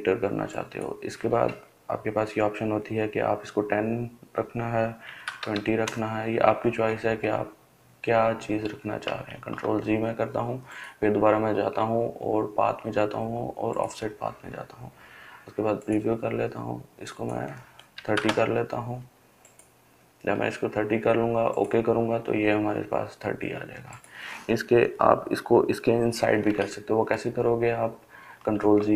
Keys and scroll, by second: 4.6-5.5 typing, 9.1 ctrl+z, 17.5-18.4 typing, 28.0 ctrl+z.